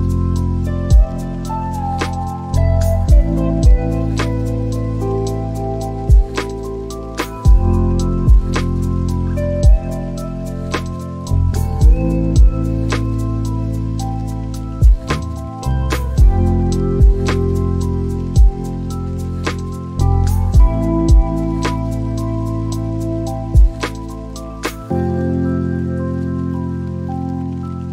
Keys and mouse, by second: 3.7-5.1 drag, 6.9-8.0 drag, 9.6 click, 14.3 click, 16.6 click, 23.4-24.3 drag, 24.8-25.8 drag, 26.4 click.